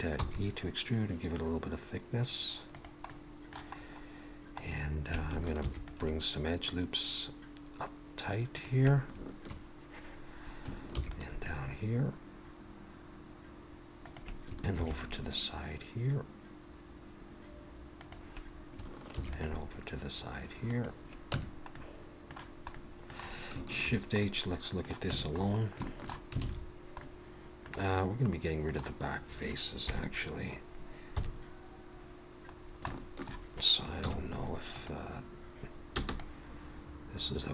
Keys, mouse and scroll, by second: 0.2 e, 3.1 middle click, 3.8-4.6 scroll up 1, 4.6-5.3 scroll down 1, 5.6 ctrl+r, 10.9 ctrl+r, 14.8 ctrl+r, 19.1 ctrl+r, 21.3 Tab, 21.7 middle click, 22.7 middle click, 23.8 shift+h, 24.2 middle click, 25.1 Tab, 25.4-25.9 scroll up 2, 25.9 shift+middle click, 26.4 alt+a, 27.0 middle click, 27.9 middle click, 29.9 KP_3, 31.2 KP_1, 32.5-32.9 scroll down 2, 32.9 shift+middle click, 34.0 z, 36.0 b.